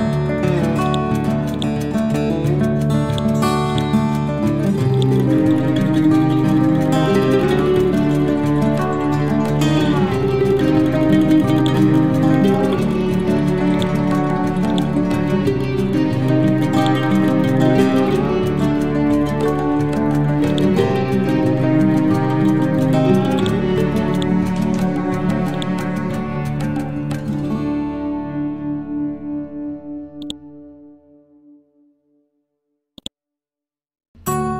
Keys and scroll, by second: 6.6 ctrl+d, 9.5 ctrl+d, 12.8 c.